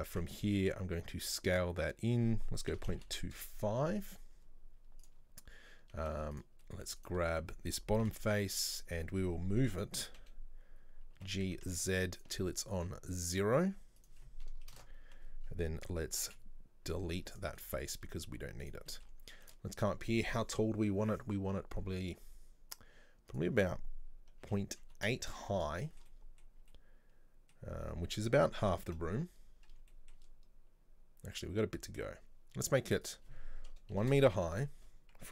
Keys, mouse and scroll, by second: 0.1 Tab, 0.7 s, 3.8 scroll up 1, 5.1 click, 6.1 z, 6.7 middle click, 7.0 right click, 8.1 Delete, 10.2 KP_3, 11.2 g, 13.2 click, 14.0-16.3 drag, 16.3 Delete, 17.6-18.7 middle drag, 18.7 right click, 18.9-22.4 middle drag, 23.4-25.9 drag, 25.9-28.9 shift+middle drag, 28.9 KP_3, 30.0-33.0 shift+middle drag, 33.1-35.3 drag.